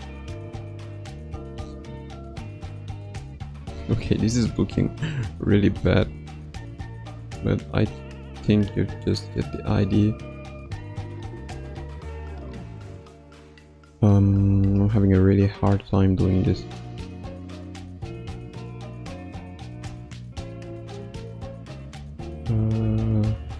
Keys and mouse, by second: 3.8 ctrl+z, 5.7-12.8 drag, 13.0 ctrl+z, 19.0-23.5 drag.